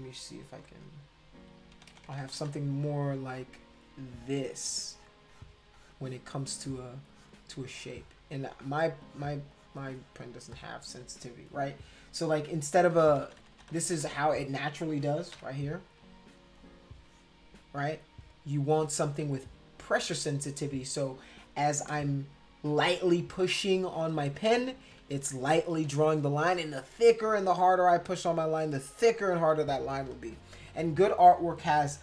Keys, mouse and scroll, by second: 0.6 e, 1.9 [, 2.1 [, 2.2 [, 2.4 click, 2.4 [, 3.6 click, 4.1 click, 4.5 click, 4.9 click, 5.3 click, 5.7 click, 6.6 click, 7.1 click, 7.7 click, 8.4 click, 9.0 click, 9.5 click, 9.9 click, 10.5 click, 12.8-14.0 typing, 15.3 b, 16.0-17.3 drag, 23.1 click, 23.8 click, 25.1 ctrl+z, 25.7 ctrl+z, 26.8-29.2 drag, 29.5 ctrl+z, 29.9 ctrl+z, 30.1 ctrl+z, 31.9 ctrl+-.